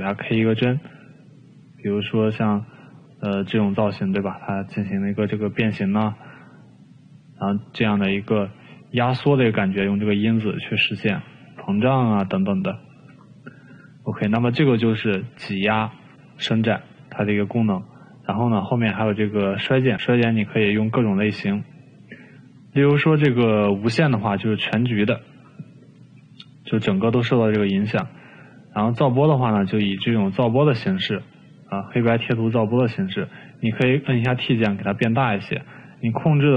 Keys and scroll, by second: 10.5 ctrl+z, 13.2 ctrl+z, 33.9 t.